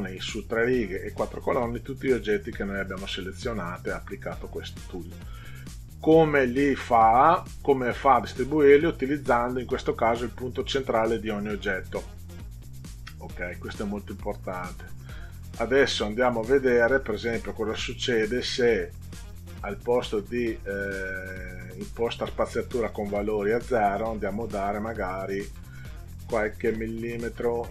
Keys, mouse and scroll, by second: 25.2 click.